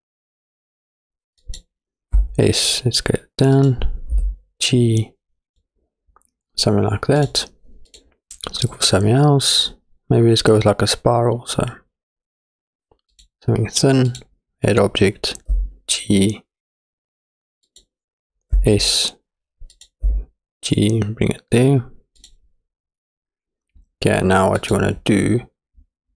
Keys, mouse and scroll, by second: 2.1 s, 4.1 g, 5.6 click, 7.2 click, 7.9-13.3 drag, 14.1 click, 15.5 g, 18.6 s, 20.1 g, 24.6 click.